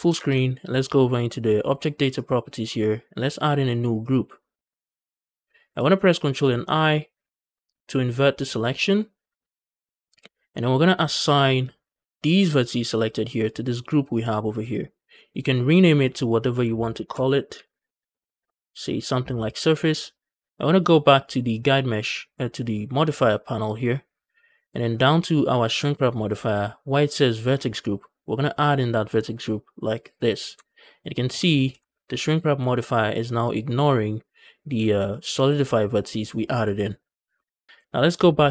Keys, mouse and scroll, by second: 0.0 ctrl+space, 0.0 shift+middle click, 0.0 scroll up 1, 2.0 click, 3.8 click, 5.7 shift+middle click, 7.0 ctrl+i, 7.3 ctrl+i, 14.0 click, 14.3 click, 14.5 click, 14.7 click, 15.6-18.2 drag, 21.0 click, 23.9-24.4 scroll down 5, 24.8-27.4 scroll up 2, 28.4-30.4 drag, 30.4 Tab, 30.7 middle click, 31.1 Tab, 31.3 middle click, 31.5 a, 31.7 a, 32.1 alt+click, 32.6-34.4 middle drag, 36.9 scroll down 1, 37.2 middle click, 37.5 scroll down 2, 37.7 shift+middle click, 37.7 scroll up 2.